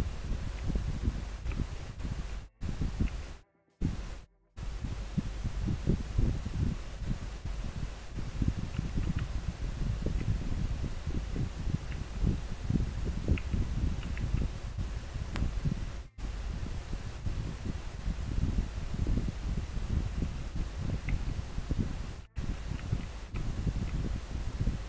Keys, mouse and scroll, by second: 1.2 scroll down 1, 10.2 scroll down 1, 11.1 scroll up 1, 23.0 scroll down 1, 24.0 scroll up 1.